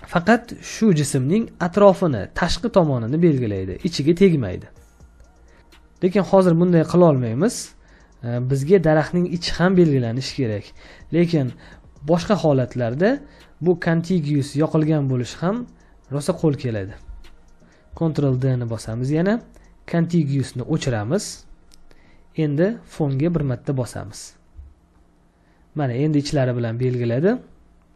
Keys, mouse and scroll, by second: 3.6 ctrl+space, 9.6 space, 9.8 ctrl+click, 18.2 ctrl+d, 24.5 space, 24.9 ctrl+click, 26.8 ctrl+click.